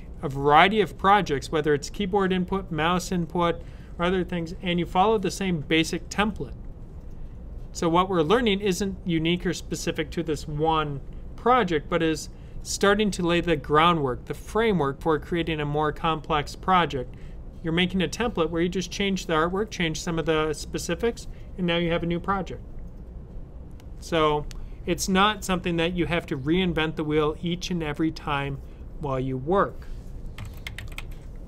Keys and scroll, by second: 30.0-31.4 typing.